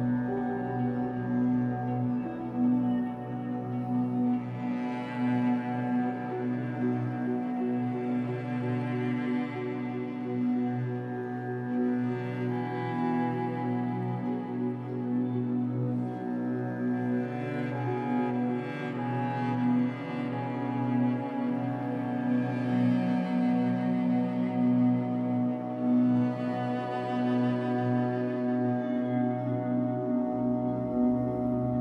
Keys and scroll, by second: 2.3 Escape, 2.6 3, 3.4 shift+Tab, 4.0 Escape, 6.4 3, 8.2 l, 9.2 shift+w, 11.9 2, 12.5 Return, 14.5 Escape, 23.8 l, 24.9 shift+w, 25.9 Escape, 26.4 3.